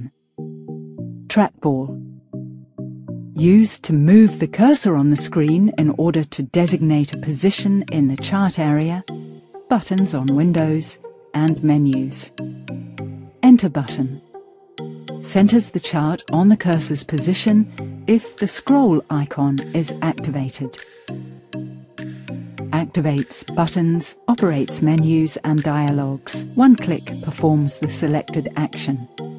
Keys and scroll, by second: 13.1 Return.